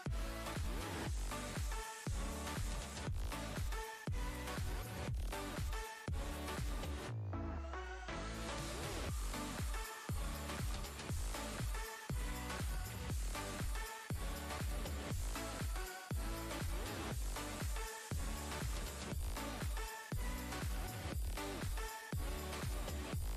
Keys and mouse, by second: 1.1 click, 3.4 click, 4.6-6.7 typing, 8.0-8.3 typing, 9.5 click, 16.2 click, 19.5 click, 23.2 click.